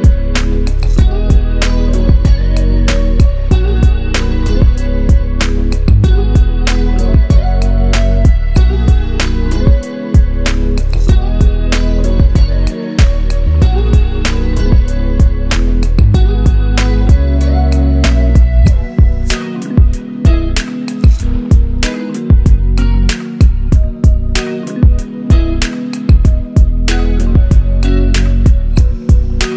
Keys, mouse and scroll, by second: 1.1 click, 3.1-3.8 click, 4.2-7.2 typing, 7.6-8.1 drag, 9.6-10.3 click, 16.1 alt+Num_Lock, 16.3 alt+Tab, 17.3 click, 17.3 Up, 18.2 scroll down 1, 19.8-20.9 drag, 21.0 ctrl+t, 21.5-24.6 drag, 24.6 scroll down 1, 26.6 ctrl+Num_Lock, 26.6 scroll down 1, 26.7 ctrl+a, 28.0 click, 28.7 ctrl+d, 29.1 click, 29.3-29.5 scroll up 1.